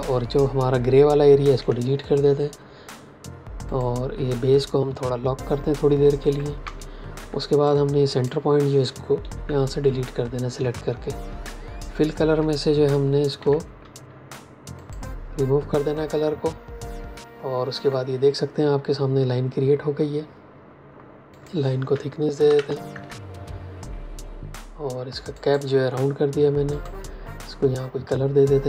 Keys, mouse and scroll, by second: 1.5 Delete, 3.7 click, 5.9 ctrl+2, 7.1 a, 7.5 click, 9.2 Delete, 13.3 x, 14.7 click, 21.2 click, 22.4 shift+Up, 22.8 Return, 25.3 click.